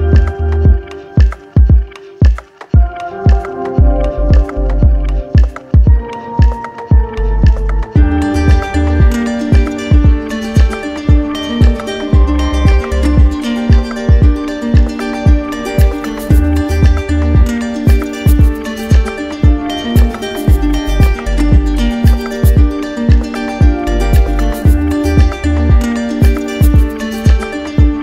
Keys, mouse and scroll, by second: 0.2 right click, 2.0 d, 2.2 d, 3.2 right click, 4.9 click, 5.6 click, 7.0-8.5 drag, 8.3 d, 9.6 right click, 11.0 click, 12.0 right click, 13.1 alt+right click, 15.1-16.2 right drag, 17.5 click, 18.3-19.4 right drag, 19.5-20.6 drag, 21.4 click, 23.1 click, 24.0 click, 25.6 right click, 27.5 right click.